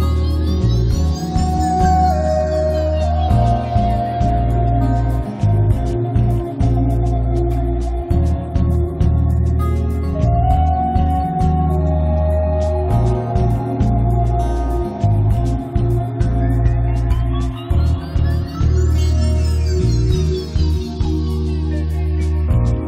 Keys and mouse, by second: 0.8-2.2 drag, 1.9 right click, 2.2 z, 3.3 click, 4.7 middle click, 5.7 click, 6.1 middle click, 7.0 click, 7.6 right click, 8.1-9.1 drag, 9.1 middle click, 9.4 z, 9.7 middle click, 10.1 click, 10.8 right click, 11.0 middle click, 11.4 ctrl+s, 12.3 middle click, 12.9 right click, 13.7 middle click, 14.4 1, 14.7 f, 15.6-18.7 drag, 17.7 f, 18.7 middle click, 19.4 click, 19.9 click, 20.1 middle click, 20.1 right click, 20.4-22.6 drag, 20.4 right click, 21.4-22.8 middle drag, 21.4-22.6 right drag.